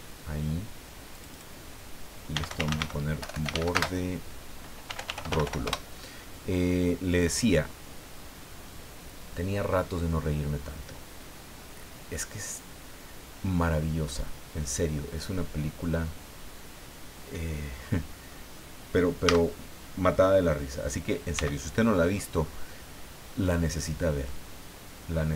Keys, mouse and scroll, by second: 1.1 click, 2.1-5.9 typing, 7.1 click, 17.8 scroll up 2, 18.3 scroll up 2, 19.2 a, 21.3 c, 21.9-22.4 scroll down 2, 22.8-23.1 scroll down 2, 23.8-25.3 drag.